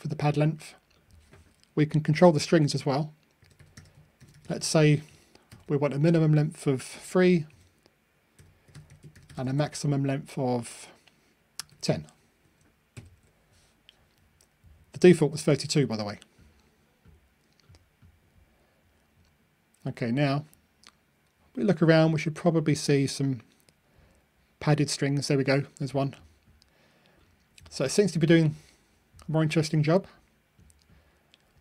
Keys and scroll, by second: 12.8 super+F9, 13.1 super+F9, 15.1 ctrl+r.